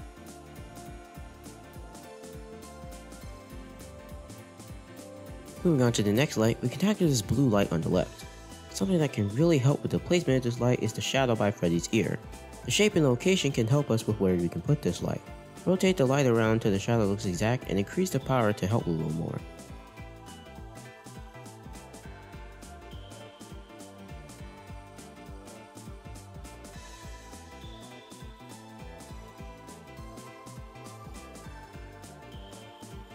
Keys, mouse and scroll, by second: 0.6 middle click, 0.6-1.3 scroll down 4, 1.3-2.2 scroll up 4, 2.7 click, 5.6 shift+a, 8.9-12.4 middle drag, 8.9-10.1 scroll up 1, 10.1 scroll up 3, 15.9 r, 20.9-21.4 scroll down 4, 21.4 r, 24.4 r, 26.7-27.9 middle drag, 28.3 r, 31.8 r.